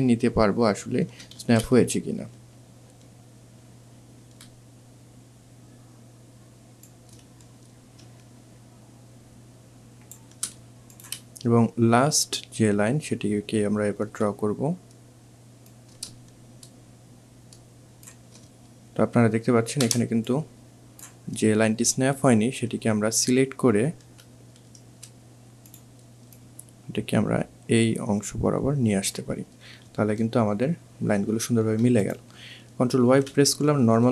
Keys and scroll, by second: 1.2 ctrl+z, 18.5 alt+shift+space, 23.3 ctrl+v, 31.5 ctrl+alt+y.